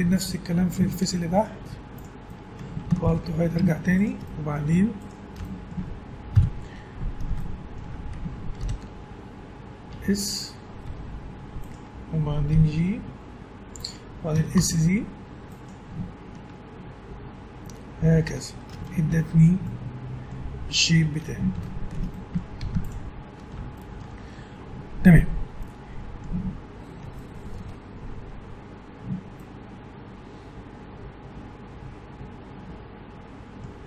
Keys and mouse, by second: 0.2-1.3 middle drag, 1.3 click, 1.6 x, 3.0 alt+h, 3.2 middle click, 3.9-5.7 drag, 5.7 middle click, 6.3 KP_1, 6.5 alt+h, 7.5-8.6 middle drag, 8.6 ctrl+l, 9.9 s, 10.8 s, 12.5 g, 14.3 s, 16.5 Tab, 18.2 a, 22.6 ctrl+s, 30.1-31.2 middle drag.